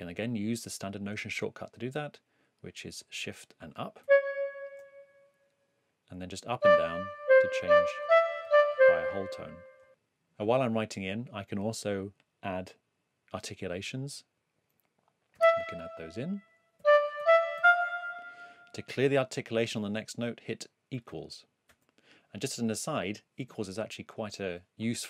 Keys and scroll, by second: 4.0 shift+Up, 6.6 Up, 7.2 Down, 7.6 Up, 8.4 Down, 15.3 e, 16.5-18.0 typing, 21.6 =.